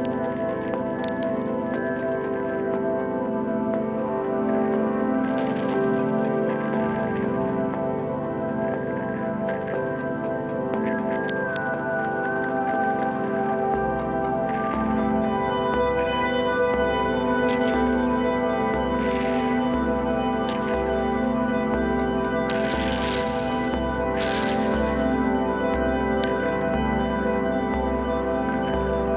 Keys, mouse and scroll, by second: 1.1-3.0 middle drag, 3.0 KP_1, 3.7-5.4 middle drag, 5.4-6.1 scroll up 2, 6.1 e, 9.9 click, 11.0 shift+click, 11.7 x, 12.6 click, 13.3 g, 15.6-16.0 scroll down 2, 16.0-17.3 middle drag, 17.3 ctrl+r, 19.7 s, 25.7 ctrl+r, 26.9-27.7 scroll up 2, 27.7 shift+click, 28.8 shift+click.